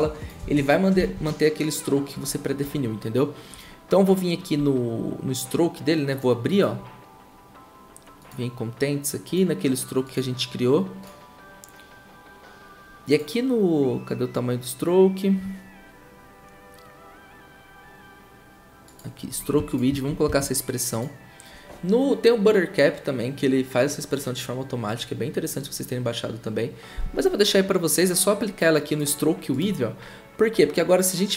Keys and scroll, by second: 0.4 ctrl+c, 1.0 ctrl+c, 20.2 ctrl+v.